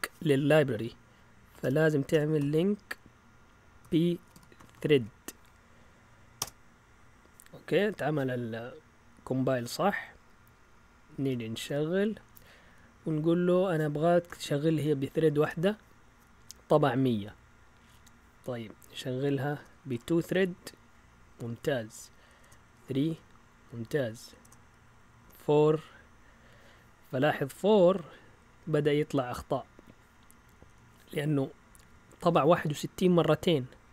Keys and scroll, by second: 0.7 Up, 1.6-5.4 typing, 6.4 Return, 10.9-11.8 typing, 14.2 1, 15.4 Return, 17.9 Up, 19.5 BackSpace, 19.9 2, 20.3 Return, 21.7 Up, 22.4 BackSpace, 22.7 3, 23.0 Return, 23.8 Up, 24.4 BackSpace, 25.2 4, 25.4 Return, 29.7 Up.